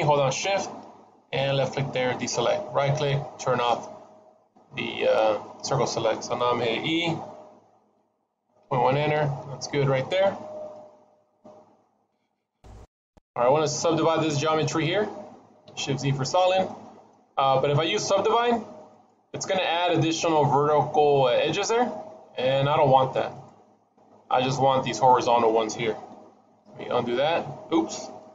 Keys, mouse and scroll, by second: 3.8 middle click, 7.7 e, 10.6 middle click, 12.1 click, 13.0-14.0 scroll up 2, 14.0 middle click, 14.8 scroll down 1, 15.5 shift+z, 16.3-17.0 scroll down 3, 16.5 middle click, 18.0 right click, 21.5 scroll up 3, 22.9 click, 23.6 click, 26.0 ctrl+z, 26.5 ctrl+z.